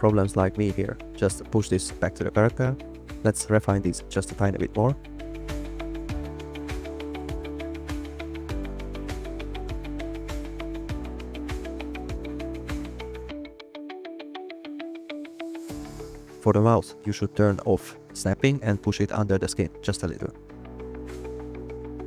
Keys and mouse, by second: 2.7 g, 3.2 click, 4.2 g, 4.7 click, 7.1 click, 8.2 click, 10.1 g, 10.7 click, 11.2 click, 11.4 g, 11.8 click, 12.6 click, 12.7 g, 13.3 click, 14.9 shift+click, 16.1 click, 20.2 g, 20.9 click.